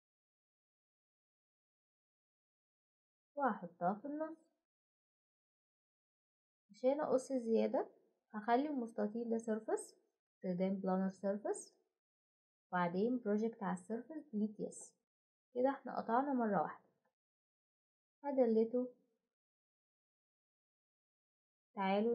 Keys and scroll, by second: 6.1 Delete, 16.6 Delete, 21.6 typing.